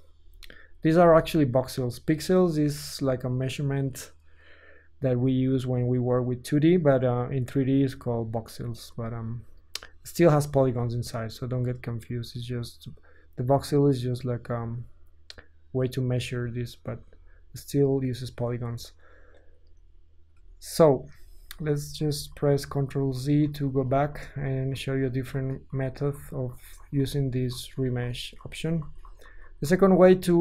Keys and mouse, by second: 0.2 Tab, 1.0 Tab, 5.0 Tab, 10.5 Tab, 11.4-14.1 middle drag, 14.1 ctrl+click, 14.4-15.8 ctrl+middle drag, 16.1 ctrl+middle click, 16.3 ctrl+middle click, 16.4 middle click, 16.9 Tab, 17.4 ctrl+middle click, 17.5-20.3 middle drag, 18.8 Tab, 20.3 KP_1, 20.4-21.4 middle drag, 21.2 Tab, 21.5 ctrl+middle click, 21.7 ctrl+z, 22.0 ctrl+z, 22.4 ctrl+z, 22.6 ctrl+middle click, 22.7 ctrl+z, 23.1 ctrl+z, 23.4 ctrl+z, 23.6 ctrl+z, 23.9 ctrl+z, 24.1 ctrl+z, 24.4 ctrl+z, 24.7 ctrl+z, 25.0 ctrl+z, 25.4 ctrl+z, 25.7 ctrl+z, 26.2 ctrl+z, 26.5 ctrl+z, 26.8 ctrl+z, 27.0 ctrl+z, 27.5 ctrl+z, 28.0 ctrl+z, 28.4 ctrl+z, 28.8 ctrl+z, 29.0 ctrl+z, 29.2 ctrl+z, 29.4 ctrl+z, 29.8 ctrl+z.